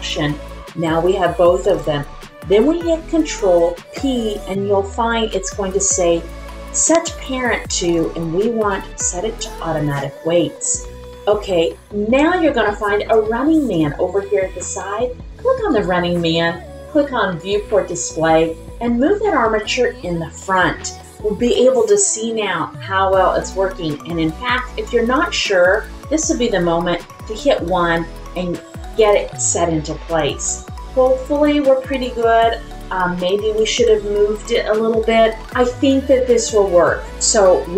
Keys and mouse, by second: 3.9 ctrl+p, 15.7 click, 17.4 click, 18.9 click, 25.4 click, 27.1 KP_1.